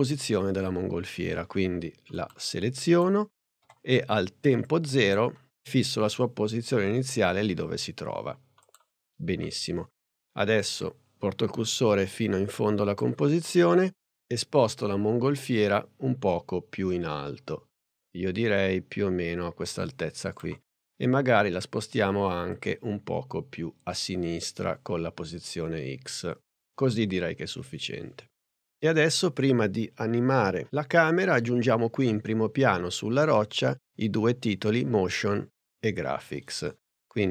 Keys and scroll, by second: 3.6 p.